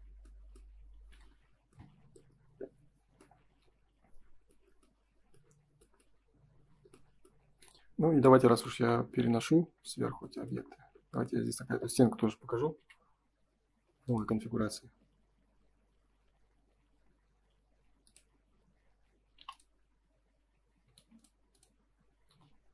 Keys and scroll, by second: 0.0 Escape, 0.8 ctrl+s, 8.7 Delete, 9.6 ctrl+s, 18.4 space, 19.3 p, 20.7 Escape, 20.9 space.